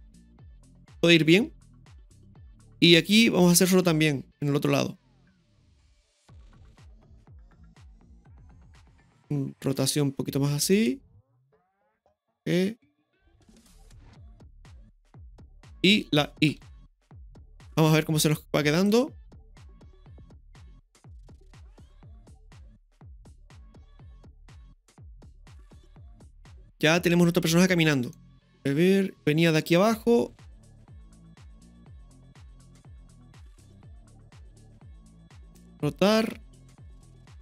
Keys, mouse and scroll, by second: 2.2 i, 3.4 click, 4.3 KP_3, 7.1 right click, 8.3 click, 13.3 g, 16.5 i, 16.9-17.3 scroll down 2, 17.4-17.8 middle drag, 18.8 click, 19.7 KP_3, 20.3 ctrl+KP_3, 21.0 space, 27.3 scroll down 1, 27.6 middle click, 28.5 right click, 28.5 scroll down 1, 29.8-32.0 drag, 33.9 g.